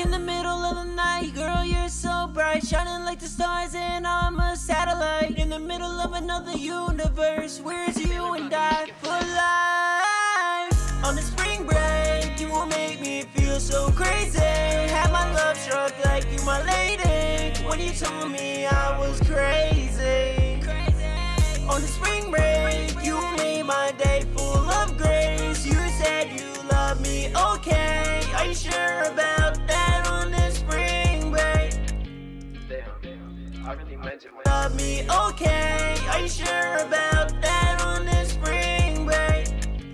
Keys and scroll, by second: 16.5 super+Tab, 22.0 super+s, 24.6 ctrl+shift+-, 24.9 super+s, 32.3 b, 35.3 super+a, 39.8 b.